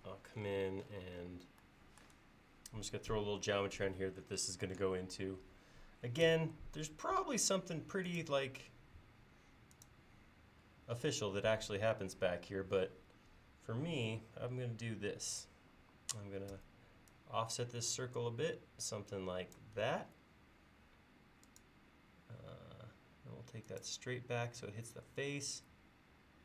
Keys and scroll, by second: 6.4 c, 16.6 f, 20.0 l, 25.4 l.